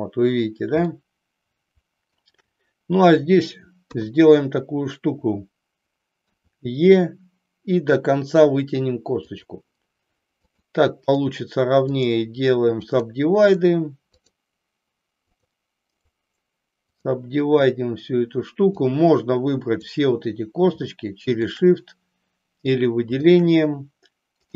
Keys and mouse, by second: 0.9-2.2 shift+middle drag, 3.7 KP_3, 6.2 e, 9.4 click, 11.2 right click, 13.0 click, 13.5 right click, 15.2 click, 18.7-20.0 drag, 23.2 shift+click.